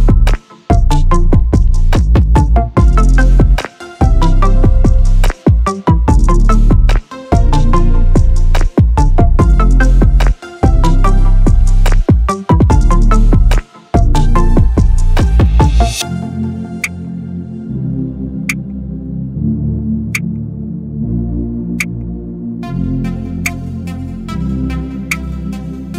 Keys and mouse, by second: 1.6 click, 5.3-13.8 drag, 16.4 click, 25.8 space.